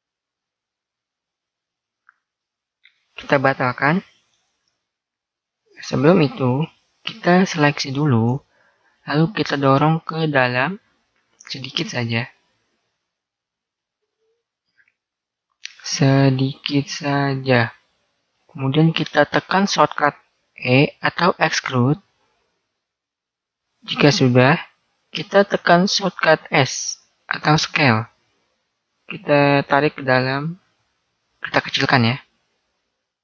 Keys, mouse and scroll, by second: 4.4 a, 5.5-7.8 right drag, 6.0 ctrl+z, 9.3 middle click, 10.1 click, 11.9-15.8 middle drag, 16.3 click, 18.1-19.7 middle drag, 23.2 e.